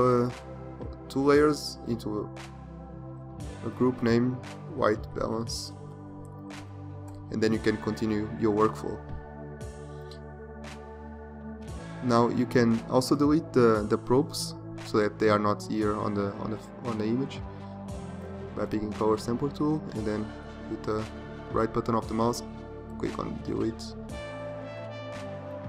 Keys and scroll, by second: 1.2 ctrl+g.